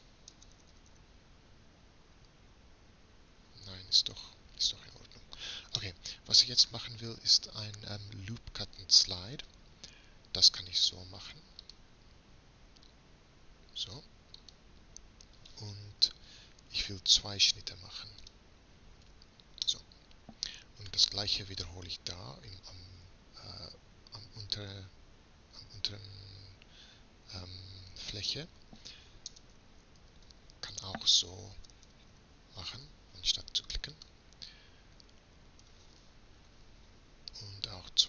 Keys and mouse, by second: 0.4 space, 4.6-5.7 middle drag, 5.9 middle click, 7.9 middle click, 9.9 a, 11.6-14.4 drag, 18.4 click, 18.8-20.1 middle drag, 23.0 a, 29.3 space, 30.4 o.